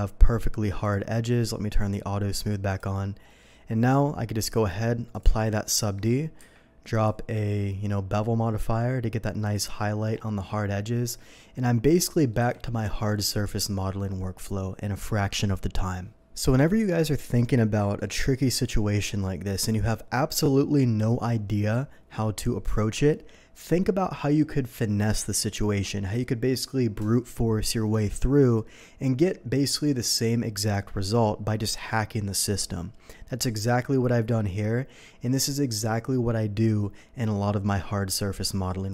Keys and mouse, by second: 0.9-9.5 drag, 6.4 q, 10.6-16.0 drag, 12.4 n, 16.4-38.9 shift+drag.